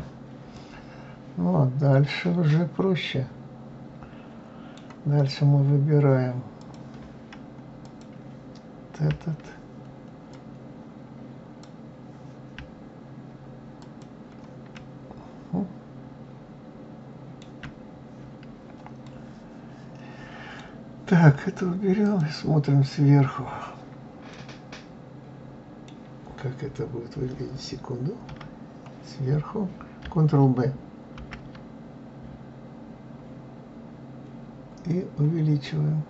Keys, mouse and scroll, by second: 0.5-3.6 middle drag, 6.6 click, 7.8 click, 10.3-13.3 drag, 13.8 shift+click, 14.7-17.7 middle drag, 19.0-22.0 middle drag, 22.0 click, 24.3-27.3 middle drag, 28.2 KP_7, 31.2 ctrl+b.